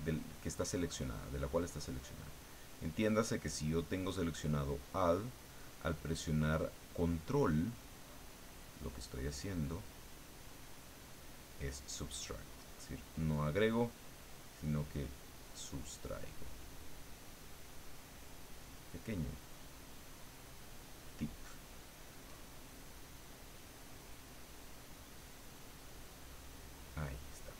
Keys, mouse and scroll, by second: 1.6 click, 2.7 click, 3.5-5.4 drag, 6.0-7.0 drag, 9.1-10.2 drag, 10.5 click, 11.6-13.5 drag, 15.6 click, 16.8-19.0 drag, 19.4-20.6 drag, 21.7-23.2 drag, 24.0-26.0 drag.